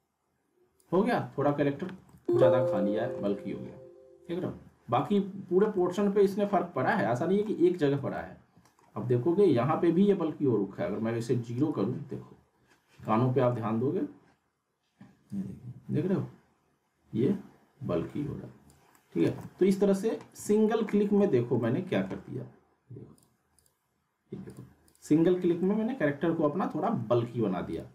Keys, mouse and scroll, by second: 1.2-1.6 scroll down 1, 1.6 z, 2.0-8.0 middle drag, 8.0 z, 8.1-8.7 alt+middle click, 9.1 scroll up 1, 11.5 right click, 13.0-13.6 alt+middle drag, 15.3-18.7 drag, 18.9 middle click, 19.2 z, 19.4-20.4 alt+middle drag, 23.2 click, 25.6-26.8 alt+middle click, 27.7 click.